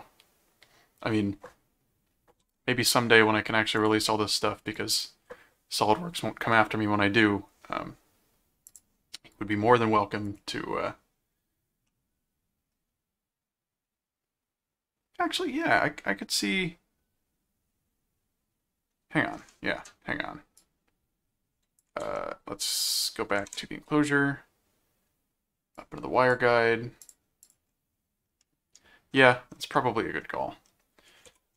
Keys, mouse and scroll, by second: 3.7 click, 4.7 click, 8.7 click, 10.3 click, 11.9-19.3 middle drag, 20.6 click, 22.0 ctrl+Tab, 23.4 ctrl+Tab, 25.7 click, 27.0 click, 28.4 middle click, 29.7 middle click, 31.0-31.5 typing.